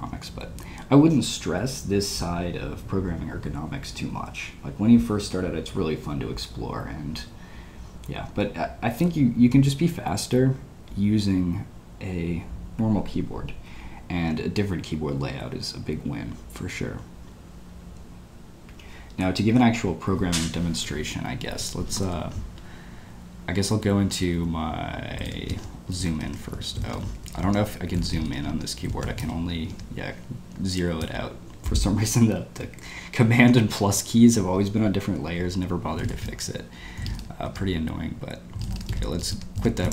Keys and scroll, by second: 25.2 shift+', 26.0 super+y, 26.1 super+y, 26.2 super+y, 26.6 ⟲, 27.2 shift+super+=, 28.3 super+5, 29.2 super+0, 31.1 ⟲, 35.9 space, 36.0 q, 36.4 Escape, 37.5 Escape, 37.6 Escape, 38.8 q, 39.6 Return.